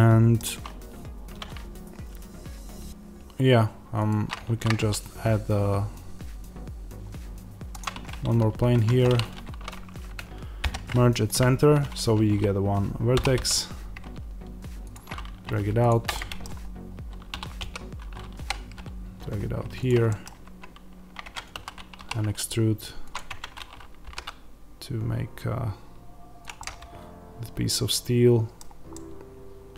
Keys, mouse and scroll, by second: 3.9 shift+right click, 8.6 Tab, 13.0 e, 15.8 shift+click, 16.0-19.8 middle drag, 17.2 e, 19.8 click, 20.0-23.1 middle drag, 20.2 Tab, 21.4 a, 21.9 e, 23.1 click, 23.2 Tab, 24.0 g, 26.3 click, 26.5-29.7 middle drag.